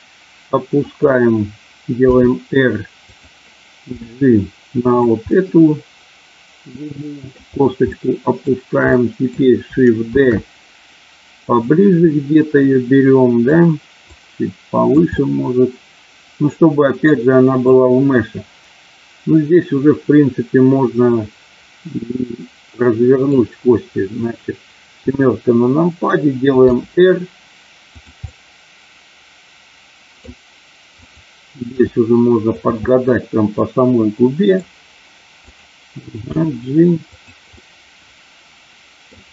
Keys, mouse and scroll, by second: 0.8 click, 2.2 r, 3.0 click, 3.9 g, 4.8 click, 5.3-7.3 middle drag, 7.9 middle click, 9.0 middle click, 10.2 shift+d, 11.4 click, 12.1-13.5 middle drag, 14.0 click, 15.1-17.5 middle drag, 22.0-23.4 middle drag, 24.9 KP_7, 26.6 r, 27.9 click, 28.1-30.3 middle drag, 31.8 g, 32.5 click, 32.9-34.5 middle drag, 36.3 g, 37.0 click, 37.5-39.1 middle drag.